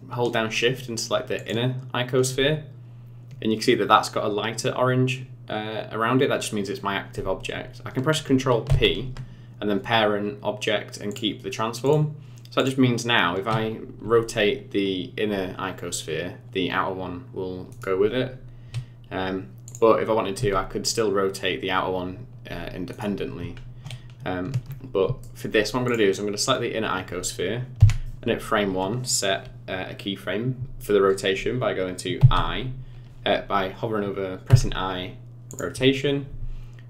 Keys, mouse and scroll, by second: 1.3 shift+click, 8.7 ctrl+p, 11.8 click, 12.6 click, 14.0 r, 18.3-19.6 scroll down 3, 19.6 click, 20.3 r, 23.5-24.1 scroll up 5, 24.1-24.8 scroll down 2, 24.8 scroll down 1, 25.2 shift+middle click, 25.8 click, 27.8 Right, 32.2 i, 34.5 i.